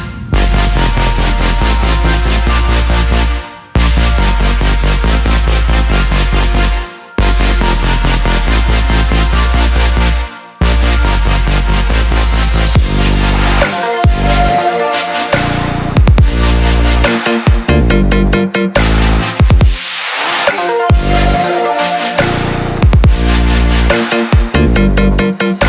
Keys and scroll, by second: 3.2 ctrl+d, 16.7 ctrl+shift+i, 23.3 typing.